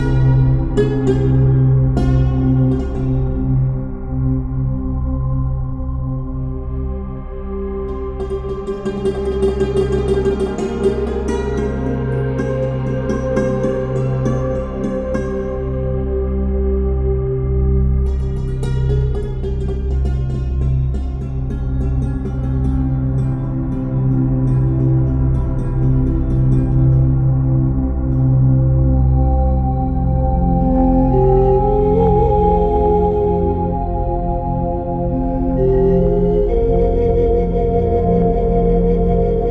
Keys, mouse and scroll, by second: 4.8 click, 6.5 space, 6.8 click, 7.0 space, 7.7 ctrl+scroll up 1, 8.5 ctrl+scroll down 1, 10.1 ctrl+scroll up 1, 10.8 space, 11.6-20.9 drag, 20.9 ctrl+scroll down 1, 22.9 ctrl+d, 27.1 ctrl+d, 38.2 click.